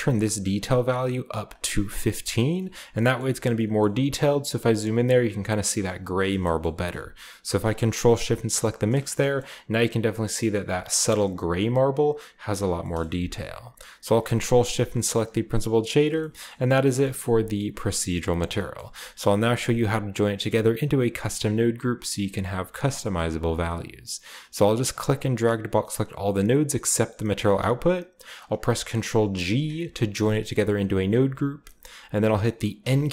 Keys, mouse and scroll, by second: 0.3-1.3 scroll up 1, 1.4-2.5 drag, 2.9-5.4 shift+middle drag, 3.3-5.4 shift+scroll up 1, 5.4-6.2 scroll up 1, 6.2 scroll down 1, 6.4-8.4 middle drag, 8.6-10.5 ctrl+shift+drag, 9.1-10.5 shift+middle drag, 9.2-10.5 shift+scroll up 1, 10.5 scroll down 1, 10.6-11.4 scroll up 1, 11.4 scroll down 1, 12.6 scroll down 1, 12.7-14.5 middle drag, 14.5 ctrl+shift+click, 14.9 click, 15.7-18.5 scroll down 4, 16.4-18.5 shift+middle drag, 18.5-19.2 scroll down 1, 18.7-19.2 middle drag, 19.2 click, 22.9 click, 23.7 drag, 24.8-27.3 drag, 28.6-29.4 ctrl+drag, 29.4 ctrl+g, 30.6-32.7 middle drag, 32.7 n.